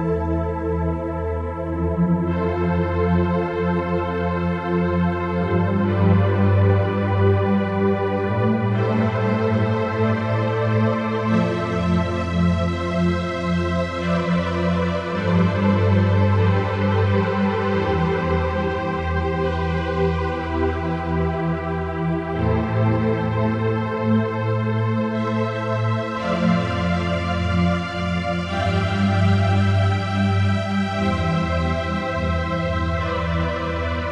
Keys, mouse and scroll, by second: 1.3 right click, 2.3 click, 3.7 right click, 4.8 click, 8.7 click, 9.5 click, 10.0 click, 10.8 click.